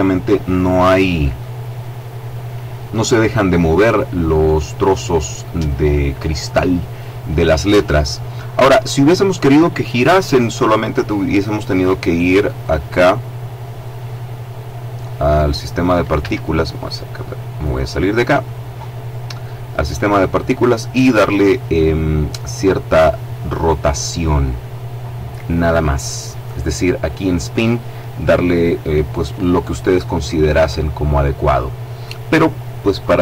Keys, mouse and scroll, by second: 12.7 click, 13.9 click, 14.6 middle click, 16.3 Escape, 17.7 right click, 18.8-19.9 middle drag, 19.9 click, 20.7-21.3 scroll down 1, 21.6-22.8 scroll up 1, 23.5 click.